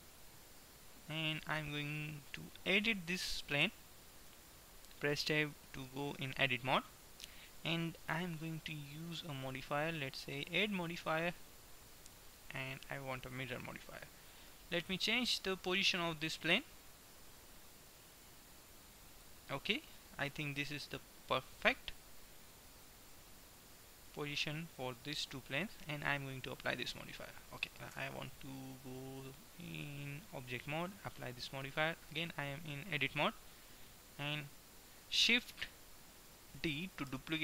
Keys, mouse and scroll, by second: 3.7 Tab, 4.4 Tab, 8.4-9.4 middle drag, 9.4-12.2 drag, 13.7-15.1 middle drag, 15.1-16.6 drag, 23.2-25.1 drag, 26.7-28.4 drag, 28.1 Tab, 30.6-32.2 drag, 31.2 Tab, 37.2 shift+d.